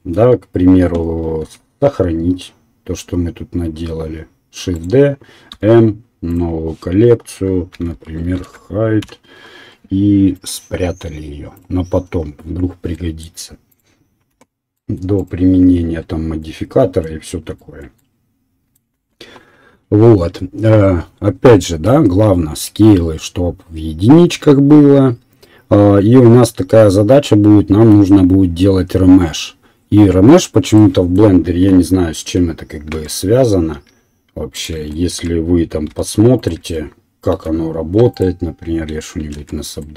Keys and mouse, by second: 1.6 shift+d, 5.5 m, 6.1-10.5 middle drag, 11.5 right click, 14.3 Delete, 14.5 middle click, 15.1 click, 15.2-39.9 middle drag, 17.2 KP_1, 32.9 shift+a, 36.0 g, 36.6 Tab, 37.4 w, 39.3 shift+r.